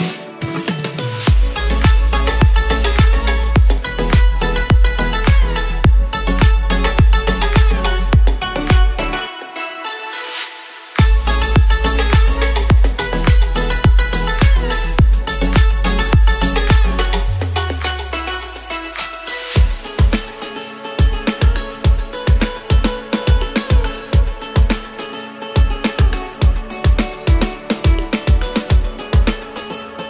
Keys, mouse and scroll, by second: 1.0 ctrl+z, 1.1 ctrl+z, 1.3-1.8 typing, 3.2 ctrl+z, 3.4 ctrl+z, 3.6 ctrl+z, 5.6 ctrl+z, 6.1 ctrl+z, 6.2 ctrl+z, 17.6 ctrl+z, 17.7 ctrl+z, 17.9 ctrl+z, 18.0-18.6 typing.